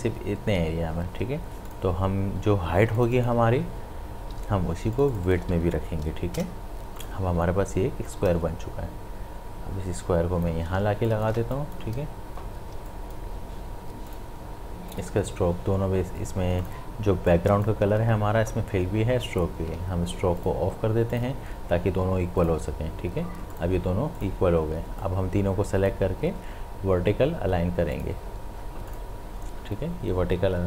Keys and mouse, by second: 1.7 click, 4.2 ctrl+c, 5.0 click, 5.5 ctrl+v, 6.4 Return, 7.0-10.8 drag, 8.4-10.6 shift+drag, 10.8 space, 11.1 ctrl+click, 11.4 space, 11.5 click, 11.9 space, 12.9 click, 13.3 space, 14.1-19.1 drag, 19.1 ctrl+z, 20.4-27.9 drag.